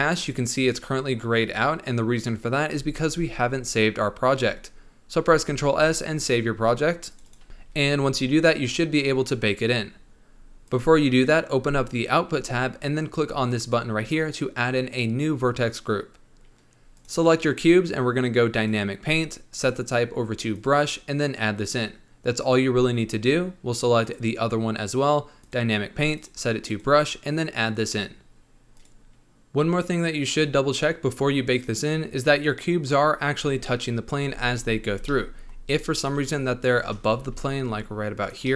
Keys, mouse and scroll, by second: 5.5 ctrl+s, 10.6-11.2 drag, 11.2-11.9 scroll down 8, 13.5-16.6 drag, 16.9 click, 18.5-24.1 drag, 25.3-28.8 drag, 29.1-32.1 middle drag, 32.1-33.3 scroll down 3, 33.3-33.6 scroll up 1, 33.6-34.3 middle drag, 34.3 space, 34.8 space, 35.1-36.1 middle drag, 36.1 click, 36.8 shift+click, 37.1 g, 38.4 scroll up 1, 38.4-38.5 middle drag.